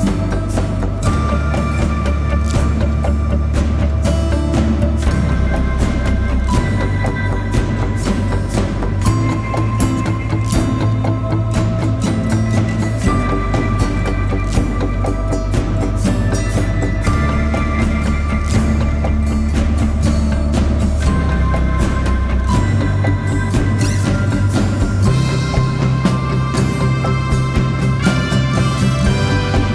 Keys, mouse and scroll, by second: 2.0 double click, 25.6 double click, 27.3 scroll down 1.